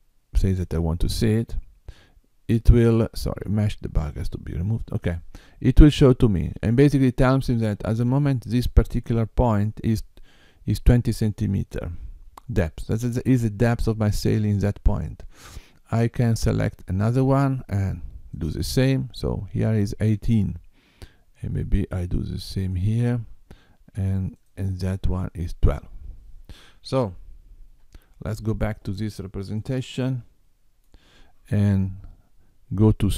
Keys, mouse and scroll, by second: 0.3 click, 4.1 click, 16.3 click, 18.3 click, 22.5 click, 24.2 click, 27.7 Tab, 29.5 middle click.